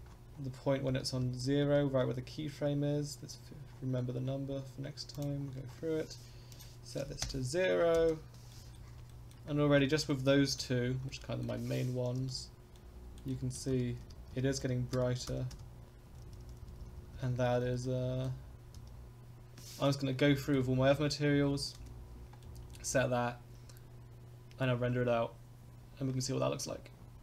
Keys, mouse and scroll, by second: 0.1-0.4 scroll down 2, 0.9 Right, 1.2 Right, 1.7 Right, 2.0 Right, 3.7-5.0 scroll up 6, 5.1 click, 5.4-6.5 scroll down 3, 6.5-8.3 drag, 7.9 i, 8.5 middle click, 9.1 shift+middle click, 9.5-9.8 scroll up 2, 9.8 shift+middle click, 10.1 middle click, 10.5 shift+middle click, 10.8 scroll up 2, 11.0-11.4 shift+middle drag, 12.2 Right, 12.7 middle click, 13.0 middle click, 13.3 middle drag, 13.7 Right, 14.0 Right, 14.3 Right, 14.6 Right, 14.9 Right, 15.3 Right, 15.5 Right, 16.1 Left, 16.3 Left, 16.6 Left, 16.8 Left, 17.0 Left, 17.2 Left, 17.3 Left, 17.5 Left, 17.6 Left, 17.8-18.2 middle drag, 18.8 Right, 20.2-20.6 shift+middle drag, 20.7 scroll up 2, 21.3 scroll down 2, 21.8 KP_Decimal, 22.4 middle click, 26.7-27.2 scroll up 5.